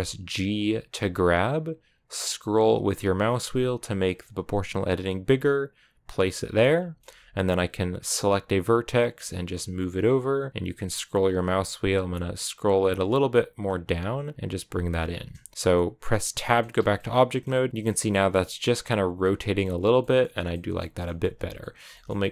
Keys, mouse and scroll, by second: 6.4-8.3 shift+middle drag, 8.3 right click, 9.1 g, 14.1 right click, 14.3 g, 14.8-15.1 scroll down 4, 15.1-16.2 middle drag, 16.2 Tab, 16.4 middle click, 16.6 a, 16.8-17.8 middle drag, 17.8 right click, 17.9-19.7 middle drag, 19.7 a, 19.8 middle click, 20.2 scroll down 1, 20.3 middle click, 20.7 a, 20.8 middle click, 21.1 a, 21.4-22.3 middle drag.